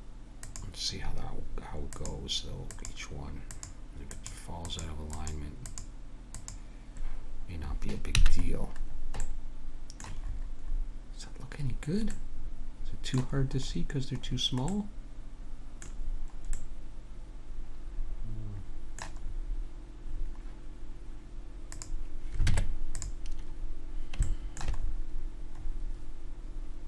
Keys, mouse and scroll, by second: 8.2 a, 8.4-17.9 middle drag, 18.1-21.7 middle drag, 21.7 click, 22.4 Tab, 22.6 click, 24.3-26.8 middle drag.